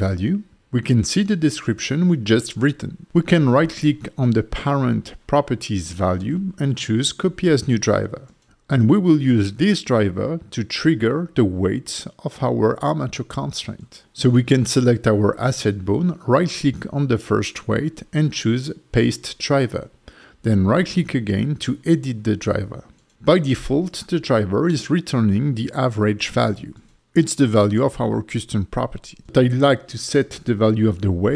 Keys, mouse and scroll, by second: 4.8 click, 4.8 right click, 5.1 right click, 11.1 click, 16.9 right click, 20.0 right click, 22.2 right click.